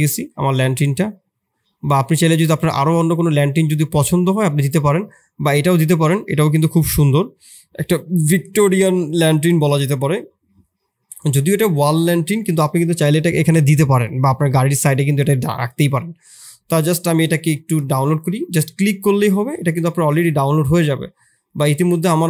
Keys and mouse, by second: 21.4 click.